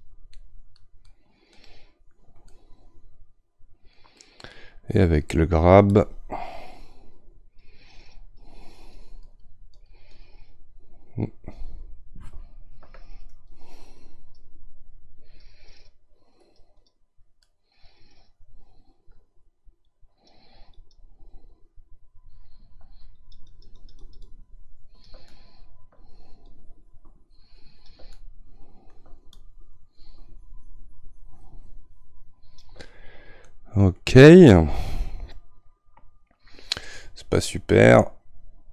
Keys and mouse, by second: 2.5-6.0 middle drag, 6.0-12.8 drag, 12.8 ctrl+z, 14.2-17.4 drag, 17.4-19.8 middle drag, 19.8-25.3 drag, 25.3-38.7 middle drag.